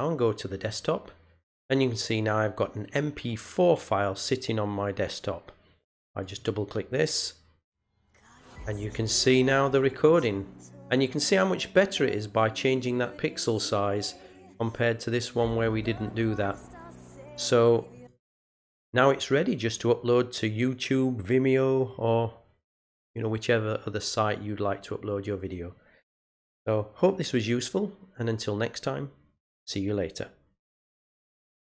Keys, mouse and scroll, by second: 1.9 click, 6.1 click, 6.3 click, 17.9 click, 31.6 click.